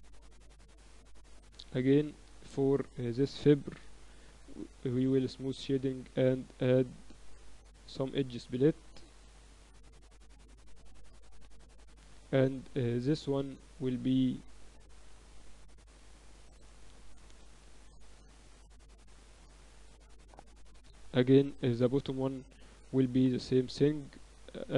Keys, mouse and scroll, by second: 1.5 KP_Divide, 2.4 right click, 3.2-4.4 drag, 4.4 KP_4, 4.6 KP_4, 5.0 t, 6.1-9.6 drag, 12.0 t, 12.8-14.6 right drag, 14.6-16.1 middle drag, 18.4-19.9 middle drag, 19.9-21.6 right drag, 21.6 KP_2, 21.8 KP_2, 23.1-24.7 right drag, 23.9 t, 24.6 click.